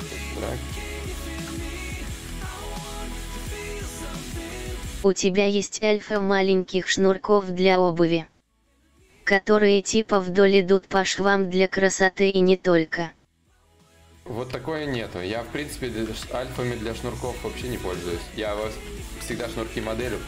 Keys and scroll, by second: 2.4 ctrl+z, 2.4 /, 6.1 ctrl+z, 6.1 y, 10.8 ctrl+z, 12.0 x, 16.2 ctrl+z, 16.2 y.